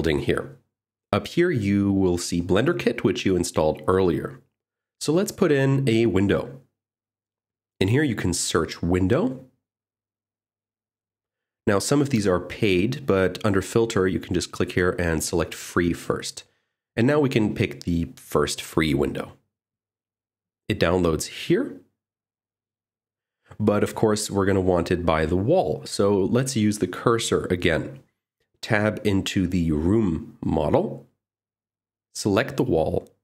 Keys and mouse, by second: 8.0-10.6 drag, 10.8 click, 14.3-16.3 drag, 19.6 click, 29.5 click, 30.0 click, 31.1 Tab, 32.6 middle click.